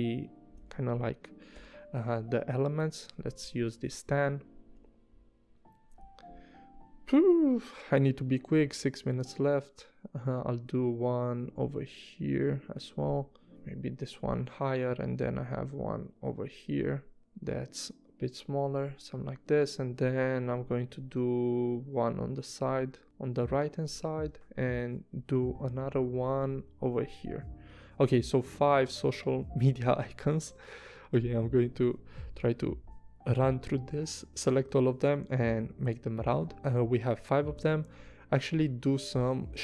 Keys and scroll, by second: 0.5 v, 1.5 i, 3.3 v, 3.7 a, 4.7 v, 6.1 v, 7.4 p, 13.5 v, 20.4 p, 23.9 v, 26.4 p, 29.9 super+z, 31.1 v, 34.5 a.